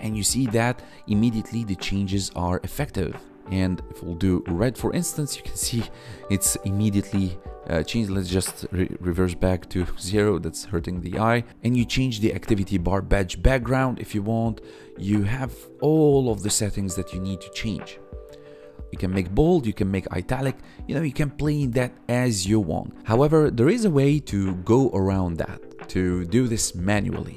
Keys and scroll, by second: 4.2 ctrl+s, 7.8 ctrl+z, 8.9 ctrl+s.